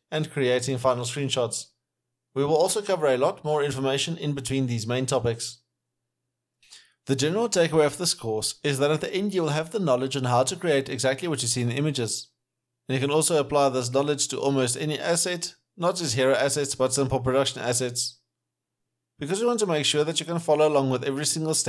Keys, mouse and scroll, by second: 4.3 Right, 4.7 double click, 5.9 alt+middle click, 6.2 alt+right click, 6.4 alt+middle click.